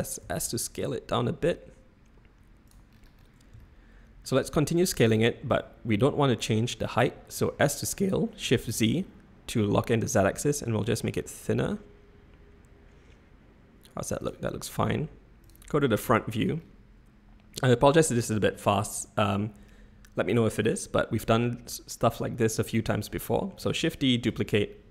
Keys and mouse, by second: 0.2 s, 3.7 shift+click, 5.2 shift+click, 7.4 s, 15.4 click, 15.5 middle click, 16.2 shift+middle click, 23.7 shift+d.